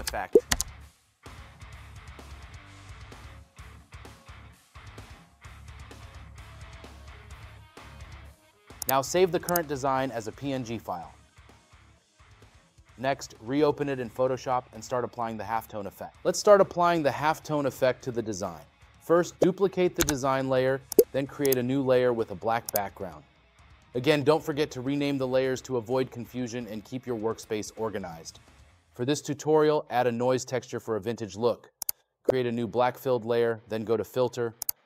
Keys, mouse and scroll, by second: 2.1 right click, 4.7 right click, 7.5 scroll, 8.3 scroll.